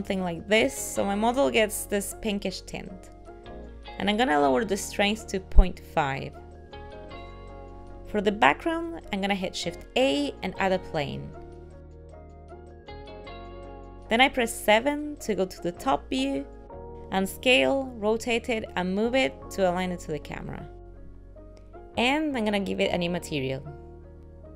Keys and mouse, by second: 3.7 click, 6.4 ctrl+middle click, 7.0 shift+middle click, 7.2 middle click, 8.3 shift+a, 12.3 r, 14.1 KP_7, 15.8 g, 17.8 r, 19.5-21.5 typing, 22.1 click, 22.6 click, 23.1 click, 24.3 click.